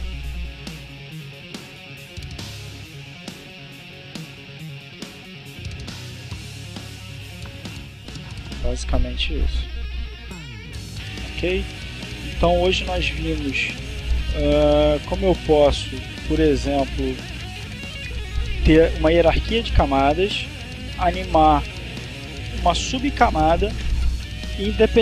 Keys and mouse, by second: 17.9 click.